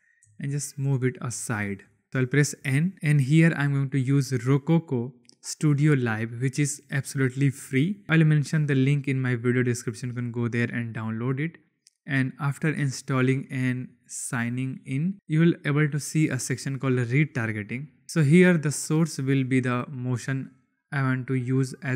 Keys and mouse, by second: 0.0 g, 0.2 x, 1.3 click, 1.8 shift+drag, 2.6 n, 3.5 click, 10.6 click, 15.5 click, 19.3 click.